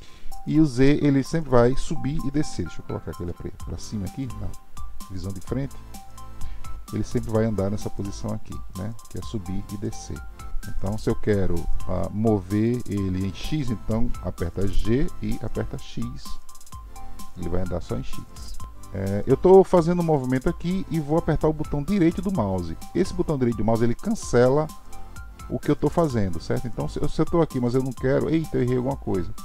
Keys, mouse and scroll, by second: 2.4 KP_1, 6.9 click, 10.4-11.1 middle drag, 12.0-14.9 middle drag, 15.3 g, 18.6 g.